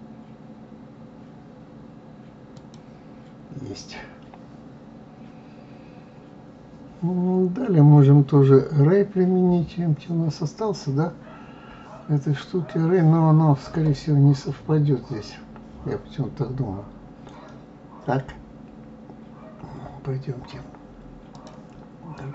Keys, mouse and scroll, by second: 3.0-3.9 scroll down 5, 6.3 scroll down 1, 21.3 click, 22.2-22.3 drag.